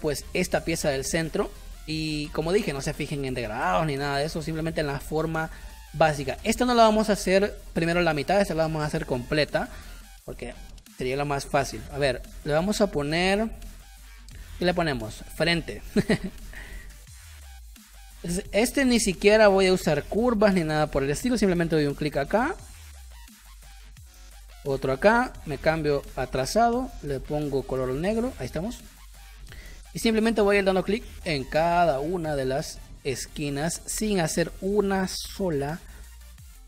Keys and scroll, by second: 6.4 p, 15.1 f, 15.3 r, 15.4 n, 15.5 t, 16.1 Return, 18.4 space, 25.5 Caps_Lock, 26.1 shift+x, 29.0 space, 31.3 space, 36.0 space.